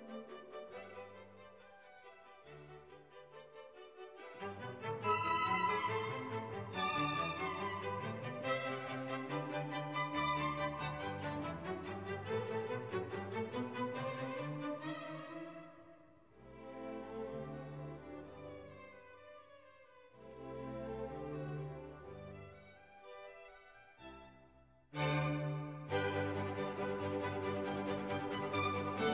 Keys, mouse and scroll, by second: 5.1 click, 5.9 click, 8.0 click, 8.9 BackSpace, 11.9 click, 17.6 click, 23.3 click, 25.3 click, 28.7 click.